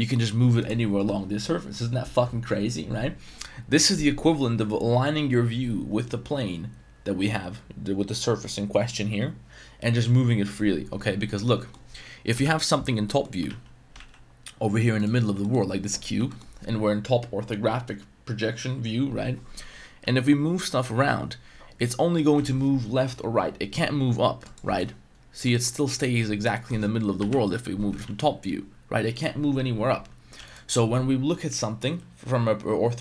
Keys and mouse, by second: 11.2-11.7 middle drag, 12.3 KP_7, 13.0 shift+middle drag, 13.4 shift+s, 13.9 shift+a, 15.4 shift+middle click, 16.3 shift+middle click, 20.0 g, 24.4-24.7 drag, 24.8-25.5 middle drag, 25.6 middle click, 26.5 middle click, 27.2 KP_7, 28.0 g, 29.1 click, 30.4 x.